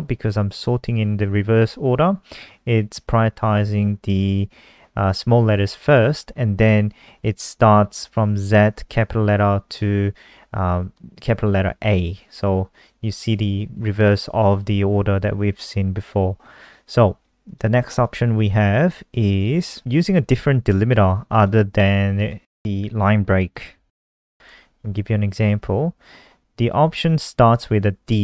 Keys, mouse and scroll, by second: 15.5 click, 15.8-17.4 scroll down 3, 17.4 click, 18.5-20.2 scroll down 2, 20.2 click, 21.6 ctrl+c, 22.1 click, 23.5 shift+click, 24.2 shift+Down, 28.1 click.